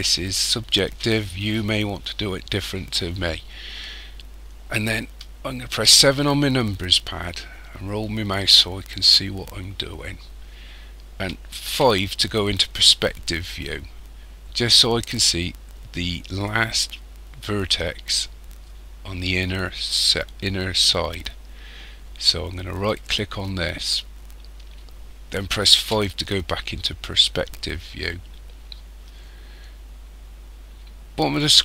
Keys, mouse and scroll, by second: 5.7 KP_7, 7.1 scroll up 2, 7.7-8.0 scroll up 4, 8.6-8.9 scroll up 2, 10.0-11.7 scroll up 1, 11.7 KP_5, 22.8 right click, 25.8 KP_5, 26.8-29.0 scroll down 6.